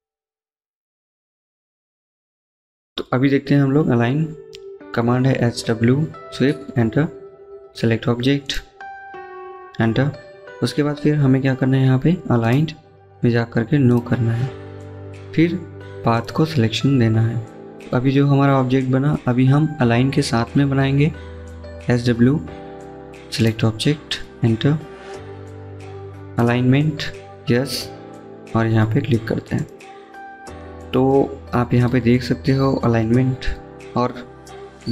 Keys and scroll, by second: 1.1 Escape, 1.4 Escape, 3.9-4.9 typing, 7.4-8.1 typing, 19.9-20.9 typing, 25.7 a.